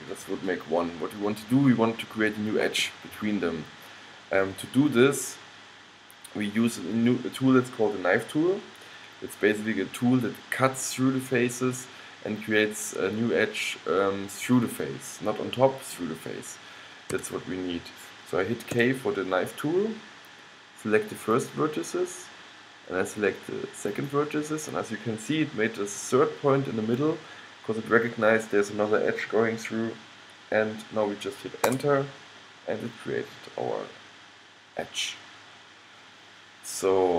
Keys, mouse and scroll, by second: 17.3 a, 18.9 k.